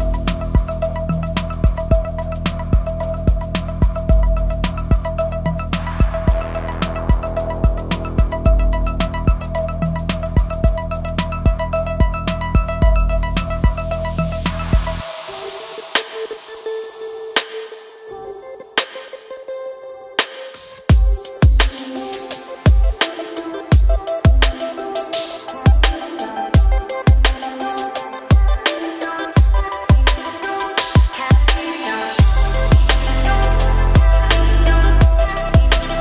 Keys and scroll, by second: 3.3 ctrl+shift+b, 8.2 ctrl+shift+b, 17.9 ctrl+shift+b, 21.2 ctrl+shift+b, 27.4 ctrl+shift+b, 29.7 ctrl+z, 32.4 ctrl+shift+b.